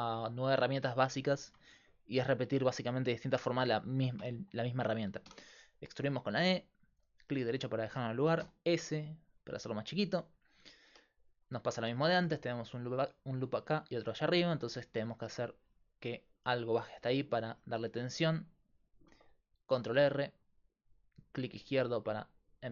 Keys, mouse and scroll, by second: 5.3 e, 8.5 s, 19.1 ctrl+r.